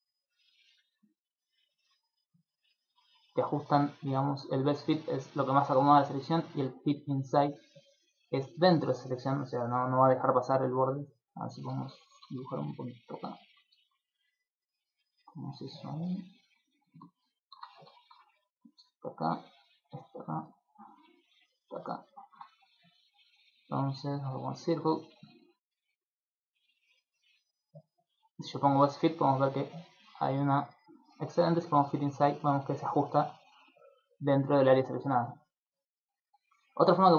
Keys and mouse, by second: 0.7 click, 1.8 click, 3.8 click, 4.1 click, 6.6 click, 10.8 click, 11.9 ctrl+z, 13.8-17.8 typing, 14.2 click, 14.8 click, 15.9 click, 17.1 ctrl+z, 18.3 ctrl+click, 19.8 ctrl+click, 21.3 ctrl+click, 24.2 click, 26.1 click, 26.9 click, 27.3 click, 30.0 click, 34.4 d, 34.6 right click, 36.2 d.